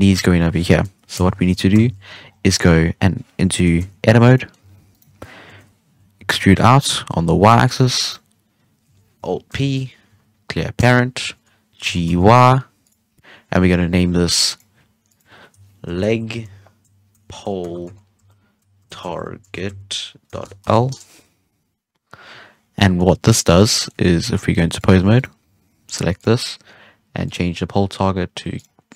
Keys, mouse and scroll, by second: 1.1 KP_3, 1.7 ctrl+z, 2.2 scroll up 6, 2.5-2.9 middle drag, 2.9-3.5 scroll down 1, 3.5 KP_3, 3.7 Tab, 4.2 scroll up 2, 4.3-4.6 middle drag, 4.6 alt+a, 4.9 right click, 5.4 KP_3, 6.1 e, 7.9 right click, 9.5 alt+p, 11.8 g, 13.2-14.3 scroll down 1, 14.4 click, 15.0-18.2 drag, 22.5 scroll down 1, 22.7 middle drag, 22.9-23.6 scroll up 1, 23.6 scroll down 2, 23.7 middle click, 24.0 ctrl+Tab, 25.1 right click, 26.1-28.9 drag.